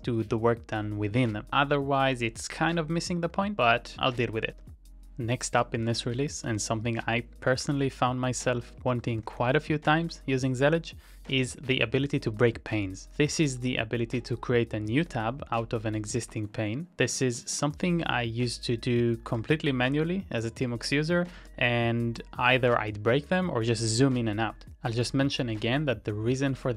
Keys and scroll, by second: 1.1 ctrl+w, 1.9 ctrl+x, 2.6 w, 3.3 Up, 3.8 Up, 4.5 v, 4.5 space, 4.6 Tab, 5.9 ctrl+c, 6.3 z, 6.5 space, 7.5 ctrl+e, 7.8 Return, 8.3-9.8 typing, 10.0 Return, 12.3-14.0 typing, 15.2 Up, 16.2 BackSpace, 17.2 Return, 18.4-22.2 typing, 24.8-26.7 typing.